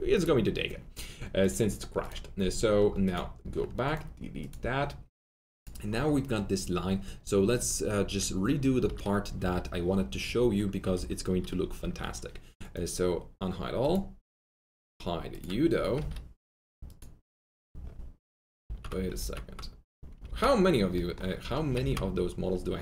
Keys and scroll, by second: 8.8 F3, 9.3 F3, 10.9 F3, 11.7 alt+q, 15.9 F3, 18.5 F3, 18.6 ctrl+z, 19.1 ctrl+z, 20.2 ctrl+z.